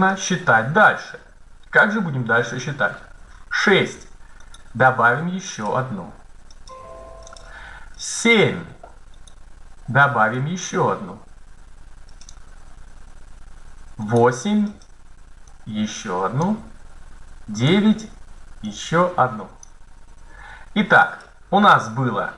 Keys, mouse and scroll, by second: 4.5 right click, 5.3 click, 6.2-7.6 drag, 9.1-10.1 right drag, 10.7-12.0 drag, 13.9 click, 15.4 middle click, 15.8-17.1 drag, 17.5-18.6 drag, 18.6 middle click, 19.1-20.6 drag.